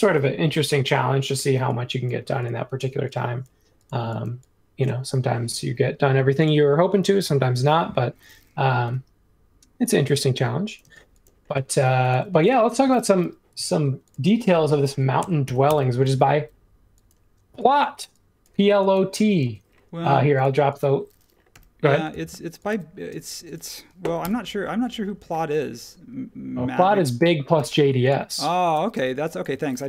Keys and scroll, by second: 6.0 space, 8.8 l, 10.8 space, 13.2 m, 14.9-16.0 typing, 19.4 space, 21.5 l, 22.7-24.2 typing, 27.5 l, 28.7 e.